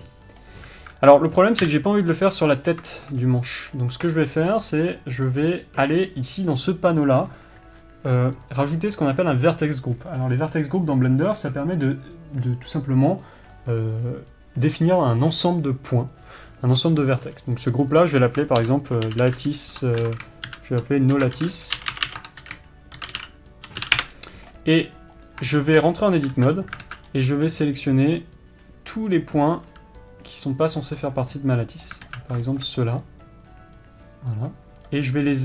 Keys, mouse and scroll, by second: 0.1-4.1 middle drag, 2.2 KP_7, 2.7-3.2 scroll up 1, 3.2 scroll down 1, 3.7-4.1 scroll up 1, 4.1 click, 16.2-18.4 drag, 24.6-25.8 drag, 24.6 BackSpace, 26.0 Tab, 26.9 alt+a, 27.4 alt+z, 27.6-28.4 scroll up 1, 29.6 b, 31.8-35.4 middle drag, 32.6 alt+z.